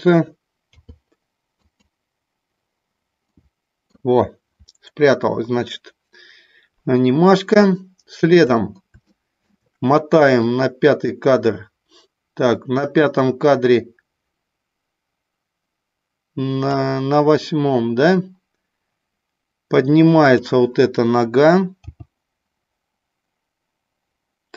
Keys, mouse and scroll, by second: 0.6 i, 3.4 middle click, 7.8 shift+middle click, 9.0 shift+middle click, 10.4-16.8 drag, 20.2 click, 21.8 g.